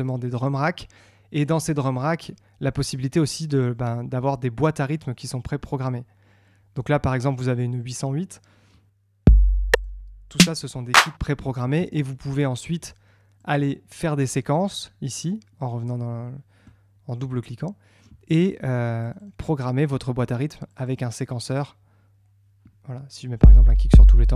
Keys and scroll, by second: 11.7 Tab.